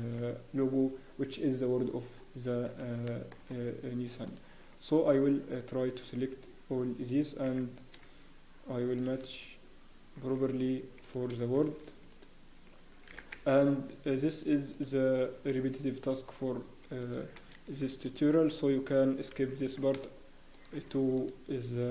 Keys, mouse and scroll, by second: 2.1 scroll up 1, 3.0 shift+middle click, 4.2 alt+click, 4.2 scroll up 5, 5.7 alt+click, 6.7 scroll up 1, 7.4 e, 9.3 click, 9.3 scroll up 1, 10.1 g, 11.5 shift+click, 12.1 alt+click, 13.1 e, 14.7 click, 15.5 g, 17.5 ctrl+r, 18.4 click, 19.3 g, 21.1 alt+click.